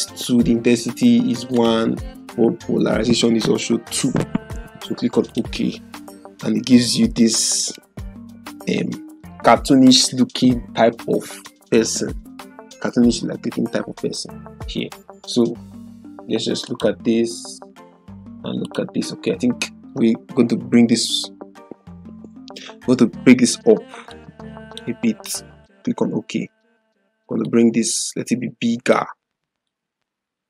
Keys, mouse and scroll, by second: 1.5 click, 5.3 click, 16.9 click, 21.0 ctrl+-, 24.1 click, 24.5-25.0 drag.